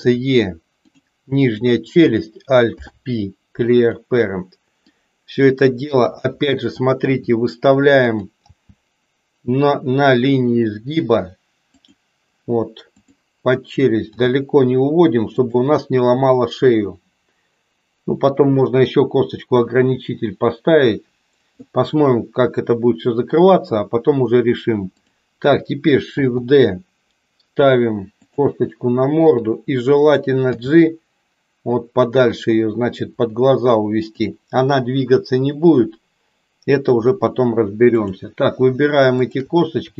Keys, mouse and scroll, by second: 1.4 click, 2.7 alt+p, 4.8-6.2 drag, 6.9 r, 8.6 g, 13.9 g, 26.2 shift+d, 29.3 click, 30.6 g, 39.1 shift+click.